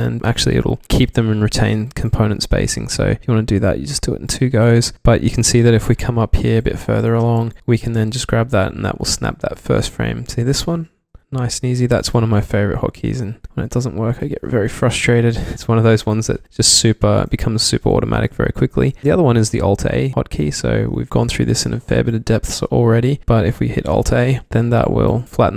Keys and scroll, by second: 2.6 ctrl+alt+a, 6.5 v, 7.0 v, 11.2 ctrl+alt+a, 12.1 v, 13.0 ctrl+alt+a, 13.6 v, 14.2 v, 15.4 ctrl+alt+a, 16.2 v, 16.5 ctrl+alt+a, 18.9-19.3 typing, 21.1-22.6 typing, 24.0 alt+a.